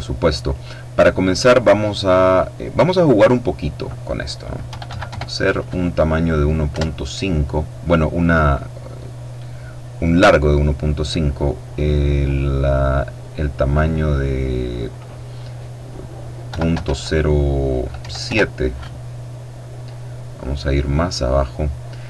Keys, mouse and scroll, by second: 2.8 click, 4.5 KP_1, 4.7 KP_Decimal, 4.8 KP_5, 6.5 KP_Enter, 12.0 click, 16.2 KP_Decimal, 16.5 KP_0, 17.8 KP_7, 18.0 KP_Enter, 19.9-20.7 scroll down 2, 20.8-21.8 scroll down 2.